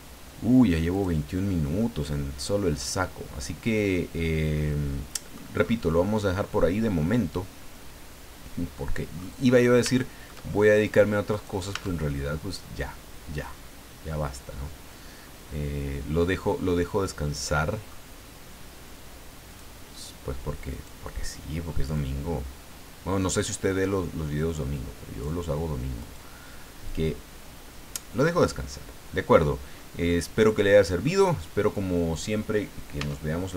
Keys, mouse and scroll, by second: 0.9 click, 1.5 scroll down 1, 1.8-5.5 middle drag, 5.6 scroll up 1, 6.5-6.8 scroll down 1, 7.0-9.4 middle drag, 9.4-9.8 scroll up 1, 10.0 shift+middle click, 10.8 right click, 11.3 right click, 11.7-18.0 middle drag, 11.7 Tab, 19.5 click, 20.7 right click, 21.9 click, 22.7 scroll down 1, 23.8-24.1 scroll up 1, 26.0 right click, 26.8-28.6 drag, 29.6 scroll down 1, 30.1-31.2 middle drag, 31.3 scroll down 2, 33.0 Tab.